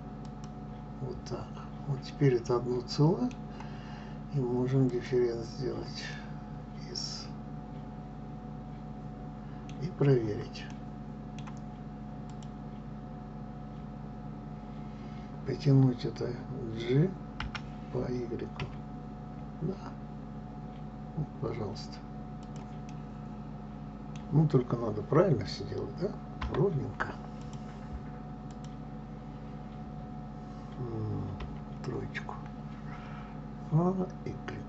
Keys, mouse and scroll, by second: 2.3-5.0 middle drag, 5.0 click, 6.2-9.2 middle drag, 9.9-10.5 scroll down 6, 10.8-12.4 middle drag, 12.4 click, 17.5 g, 23.0-27.4 middle drag, 27.4 click, 28.5 click, 31.5 KP_3, 32.4 scroll up 2.